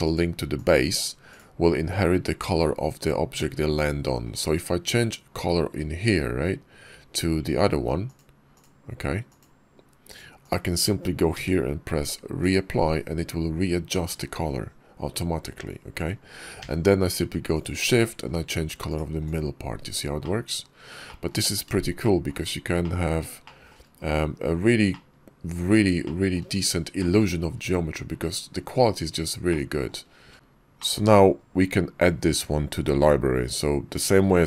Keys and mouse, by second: 0.4 click, 1.1 click, 4.1 click, 7.9 click, 8.4 click, 10.3 click, 12.4 d, 17.5 d, 19.1 click, 20.1 click, 20.9 shift+drag, 21.9 shift+drag, 22.7 click, 23.3 shift+drag, 24.8 shift+click, 25.9 shift+middle click, 26.9 shift+click, 29.3 click, 29.9 ctrl+z, 30.8 middle click.